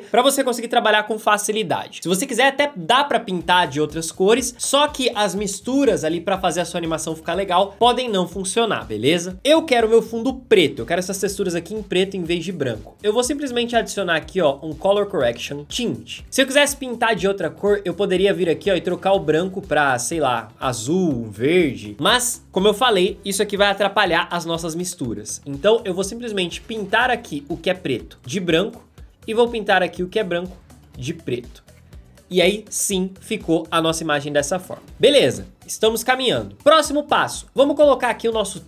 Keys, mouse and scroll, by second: 35.1 space.